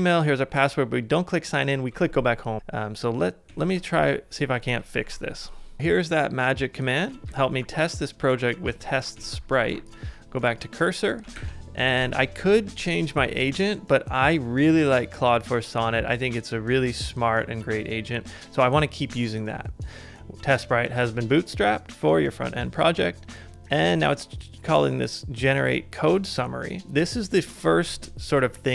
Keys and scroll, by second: 2.6 super+Tab, 3.5 super+Tab, 5.0 alt+super+b, 7.3 super+c, 8.6 super+Tab, 9.1 super+Tab, 11.3 super+v, 12.4 BackSpace.